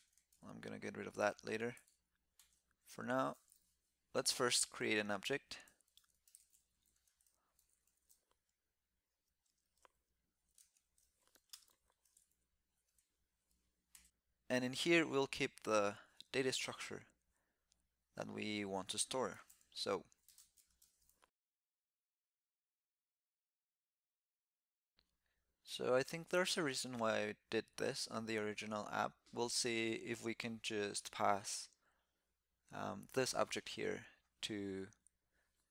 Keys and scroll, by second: 11.8 alt+c.